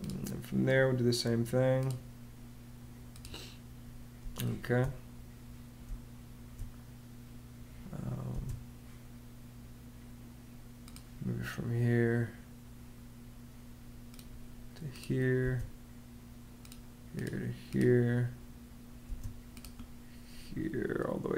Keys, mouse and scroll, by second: 4.0 space, 5.6 space, 8.1 space, 15.2 space, 18.8 space.